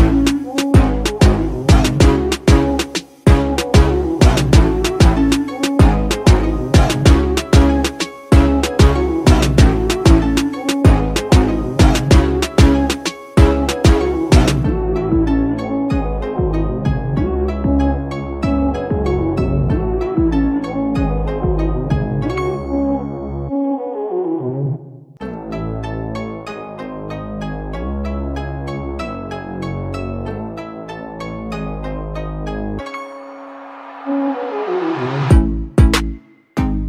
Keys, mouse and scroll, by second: 8.1 alt+click, 13.5 right click, 15.2 double click, 24.5 alt+click.